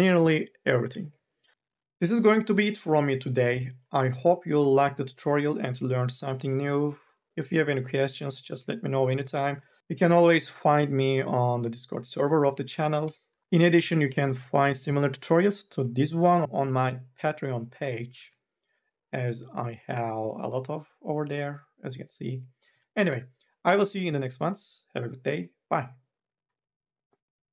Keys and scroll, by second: 18.3 alt+Tab, 22.8 alt+Tab.